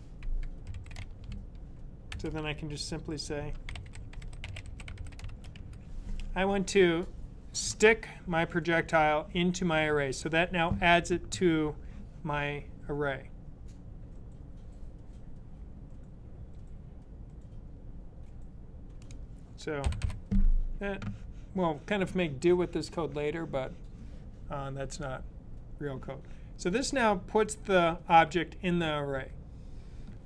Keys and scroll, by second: 0.3-1.9 typing, 3.0-5.8 typing, 19.8 typing.